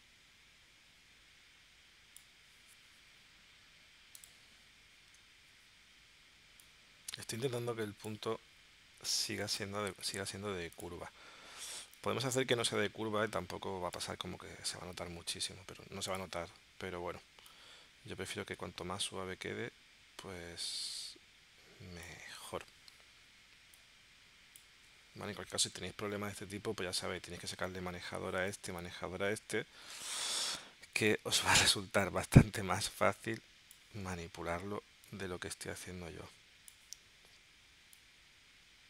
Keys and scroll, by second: 30.2 shift+c.